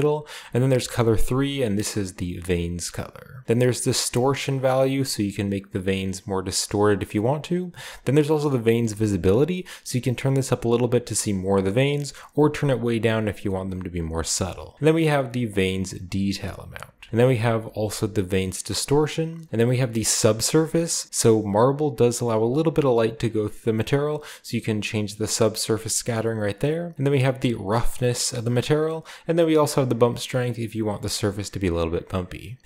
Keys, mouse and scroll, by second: 1.1-2.8 drag, 2.8 middle click, 3.6-6.8 drag, 7.4-8.6 drag, 8.9-14.0 shift+drag, 14.2 shift+middle click, 14.7-16.5 shift+drag, 16.7 shift+middle click, 17.1-18.9 shift+drag, 19.1 shift+drag, 19.2 shift+middle drag, 19.7-21.1 shift+drag, 23.2-25.1 drag, 25.1 middle click, 26.7-28.4 drag, 28.8-31.8 drag, 31.8 middle click, 32.2 middle drag, 32.4 click, 32.6 middle click.